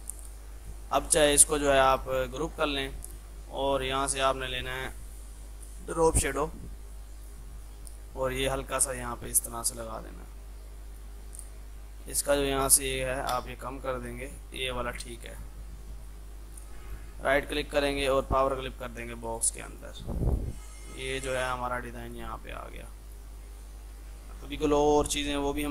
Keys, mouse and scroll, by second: 1.4 ctrl+z, 2.5 ctrl+g, 3.7-9.3 drag, 9.3-12.3 drag, 15.4 click, 16.4 ctrl+z, 16.9 right click, 17.5-25.7 drag.